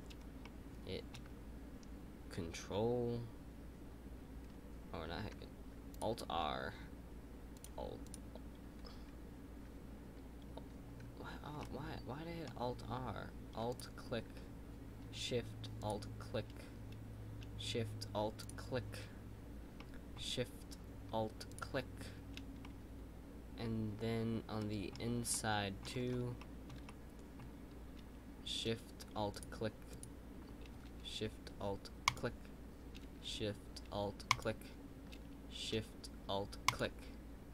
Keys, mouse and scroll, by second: 0.0-0.4 scroll up 2, 0.4-3.5 shift+middle drag, 5.9 click, 6.2-8.3 r, 7.5 click, 7.8 r, 11.6-13.7 middle drag, 13.7 click, 15.7 alt+shift+click, 19.7-21.4 middle drag, 21.4 alt+shift+click, 22.6-25.8 middle drag, 25.8-26.3 scroll up 4, 26.3-29.3 shift+middle drag, 29.3 alt+shift+click.